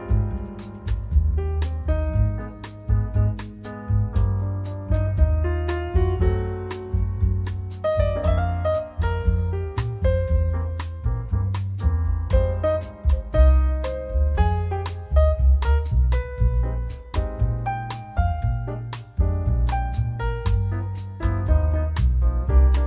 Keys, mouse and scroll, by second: 0.4-1.8 scroll up 3, 2.2 click, 3.6 click, 5.3-8.8 drag, 10.4-11.9 drag, 12.0-13.9 drag, 14.0-14.3 scroll down 1, 14.6 scroll up 1, 15.3-15.6 scroll up 1, 16.2 click, 17.4 click, 19.0 click, 20.1-21.5 drag, 21.7 scroll down 1, 22.1 scroll up 1.